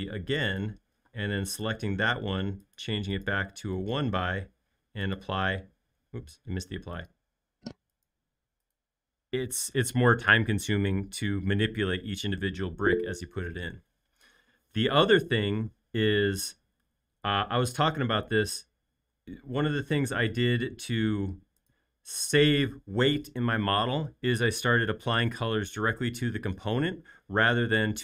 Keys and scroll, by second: 1.1 space.